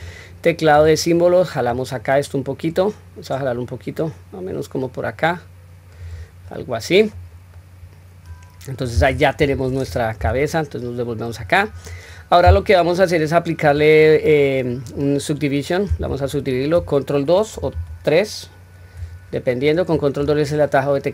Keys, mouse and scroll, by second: 0.6 click, 1.7 click, 1.9-6.0 drag, 6.5 middle click, 7.5-8.8 middle drag, 9.4 KP_1, 10.2 Tab, 10.8 scroll down 1, 11.4 scroll up 1, 17.5 ctrl+2, 20.0 click.